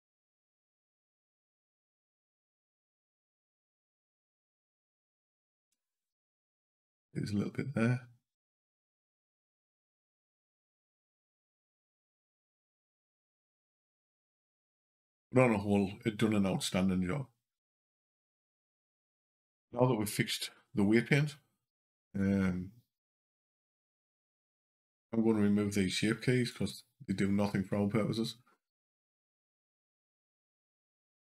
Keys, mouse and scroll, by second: 1.0 click, 3.6 click, 4.5 Up, 5.0 Down, 5.4 Down, 7.0 Up, 8.3 click, 10.4 click, 10.6 Down, 11.1 Down, 18.1 click, 21.9 click, 30.4 scroll down 2.